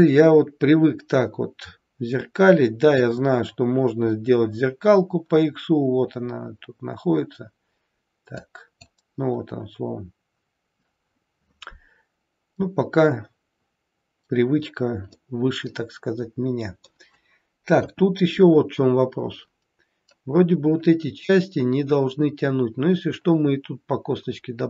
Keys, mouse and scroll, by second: 6.5-7.0 scroll up 1, 7.0-8.2 scroll down 1, 8.2 click, 8.2-8.6 scroll down 1, 15.1 middle click, 17.7 KP_1.